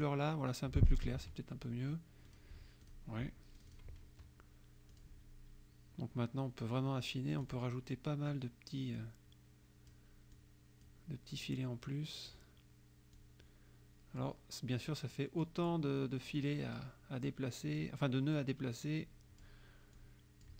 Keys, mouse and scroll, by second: 0.0 click, 1.2 F1, 2.3 click, 2.9 click, 3.6 click, 5.0 click, 7.4 click, 9.0-10.2 drag, 10.4 click, 11.5-12.5 drag, 13.2-14.5 drag, 14.9 click, 16.5 click, 17.3 click, 18.5-19.7 drag, 20.0 click.